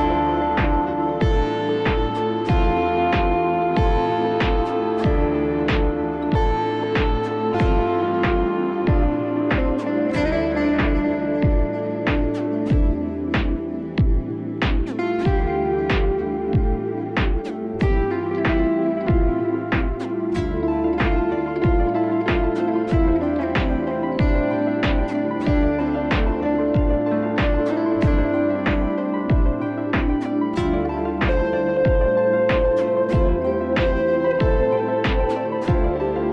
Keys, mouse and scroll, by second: 0.1 [, 1.6 [, 2.7 click, 3.3 click, 3.3 ], 4.6-5.4 alt+scroll down 1, 5.7 click, 6.6 click, 7.4 click, 7.8 click, 9.1 click, 9.4 click, 9.8 click, 11.8 click, 16.7 click, 17.1 click, 18.4 click, 19.9 click, 20.5 click, 22.8 click, 23.3 click, 25.4 click, 26.3 ctrl+alt+shift+e, 29.8 click, 30.6 click, 31.8 click, 32.8 click, 34.3 click.